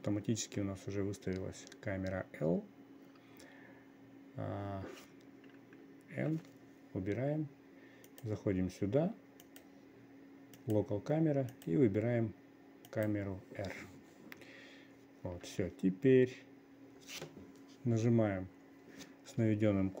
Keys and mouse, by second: 6.7 n, 8.6 click, 9.9 click, 11.1 click, 12.1-13.6 drag, 15.9 n.